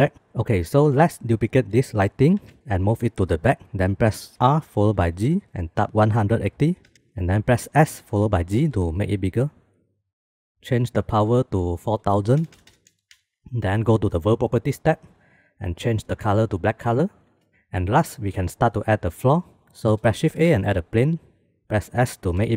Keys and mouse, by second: 0.5 shift+d, 4.3 r, 8.6 s, 11.6-13.3 drag, 12.4 KP_0, 12.5 KP_0, 15.8 click, 20.0 shift+a, 22.0 s.